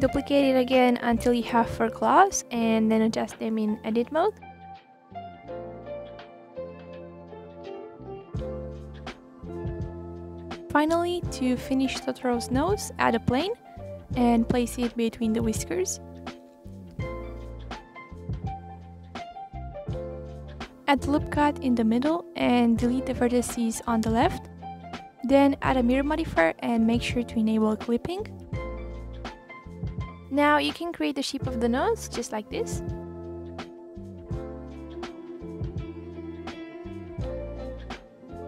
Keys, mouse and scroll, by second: 0.4 click, 1.2 shift+d, 1.4 click, 1.8 shift+d, 1.9 click, 2.3 click, 2.4-3.0 middle drag, 3.0 click, 3.3 click, 3.4 click, 3.7-4.1 middle drag, 4.1 scroll down 1, 4.4 KP_3, 4.8 middle click, 5.0 KP_1, 5.6-6.4 drag, 6.6 scroll up 2, 6.6 click, 7.0 g, 7.9 r, 8.4 g, 8.9 r, 9.3 click, 9.5 middle click, 10.0 click, 10.2 scroll down 2, 10.3 middle click, 10.5 scroll up 3, 10.6 click, 10.7 middle drag, 10.8 click, 11.0 click, 11.3 ctrl+s, 11.9 shift+a, 12.6-13.4 middle drag, 13.4 click, 14.1 r, 16.9 click, 18.1 KP_1, 18.2-18.8 scroll up 2, 18.8 s, 19.7-20.8 drag, 22.4 ctrl+r, 23.1 scroll up 4, 23.4 click, 23.9 Delete, 24.6-26.6 drag, 27.0 click, 28.3 scroll down 2, 28.4 scroll up 3, 28.6 click, 29.0 click, 29.9 click, 30.7 click, 31.2 scroll up 1, 31.4 click, 32.0 click, 32.5 click, 33.1 click, 33.6 click, 34.6 e, 35.6 s, 36.5-37.0 scroll down 2, 37.0 click, 37.3 click.